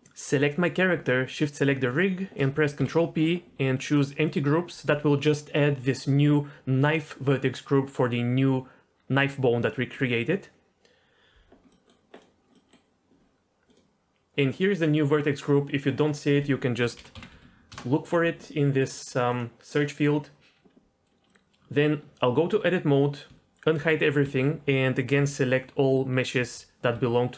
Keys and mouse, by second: 0.4 click, 2.8 ctrl+p, 11.8 middle click, 12.5 middle click, 13.7 click, 16.3-17.7 drag, 18.8 click, 19.3 click, 21.3 middle click, 21.6 Tab, 23.6 alt+h, 24.3 alt+a, 25.2 l, 26.4 l, 26.9 l.